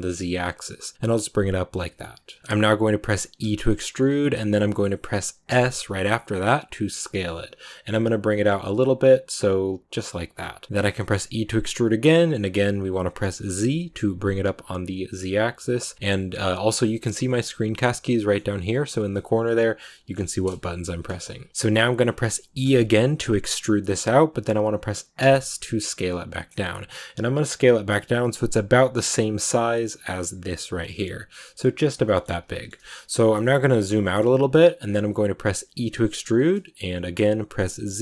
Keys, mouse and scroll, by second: 2.4 shift+middle click, 3.3 e, 17.9-18.3 scroll up 1, 18.9-22.5 middle drag, 22.5 e, 31.9 shift+middle click, 32.1 shift+scroll up 2, 32.2-32.9 scroll down 3, 32.4 shift+middle click, 33.3-33.9 scroll down 2, 33.3 shift+middle click, 33.9 shift+middle click, 34.7 scroll down 2, 35.6 e.